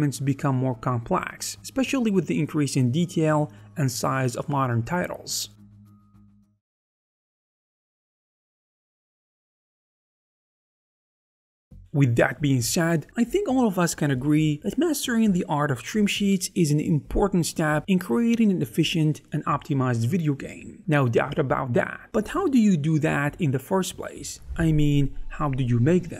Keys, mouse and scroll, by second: 18.0 shift+middle click, 18.1 ctrl+middle click, 18.7 w, 19.1 alt+a, 19.5 ctrl+middle click, 20.0 shift+middle click, 20.3 Tab, 20.4 ctrl+middle click, 20.8 alt+a, 20.9 middle click.